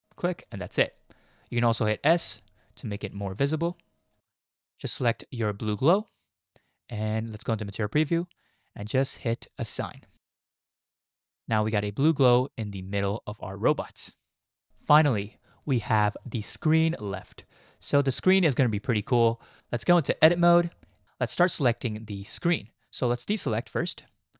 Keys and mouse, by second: 0.6-1.6 middle drag, 2.2 s, 4.2 middle click, 7.6 z, 11.1 Tab, 11.4-14.4 drag, 14.1-14.4 middle drag, 16.3 shift+middle drag, 17.7-19.5 drag, 17.7-19.5 middle drag, 20.2 Tab, 21.6-22.2 drag.